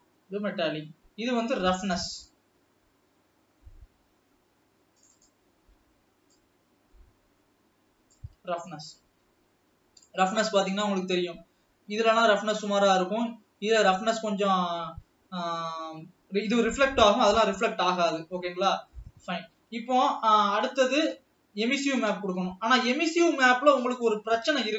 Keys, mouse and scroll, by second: 5.4-6.1 drag, 6.8 click, 10.4-11.3 middle drag, 11.3-11.9 scroll up 2, 11.9-12.4 scroll up 1, 12.4-18.1 middle drag, 18.1 scroll down 2, 18.7-19.9 middle drag, 19.9 ctrl+s, 20.4 scroll down 1, 20.7-22.2 middle drag, 22.2 click, 22.8 shift+d.